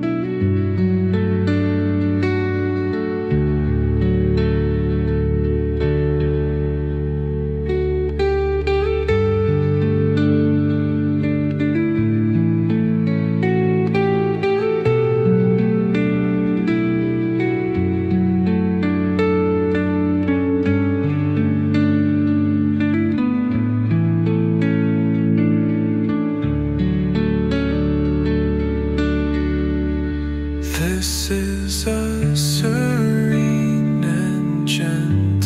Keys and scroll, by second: 3.7 ctrl+z, 7.2 space, 20.2 space, 27.3 space, 30.4 space.